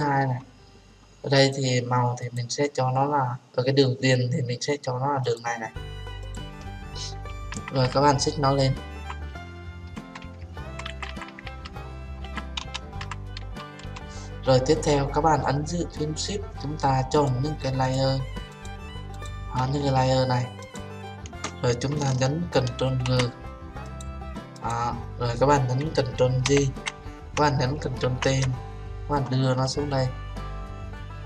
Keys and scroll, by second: 22.9 ctrl+g, 26.5 ctrl+j, 28.1 ctrl+t.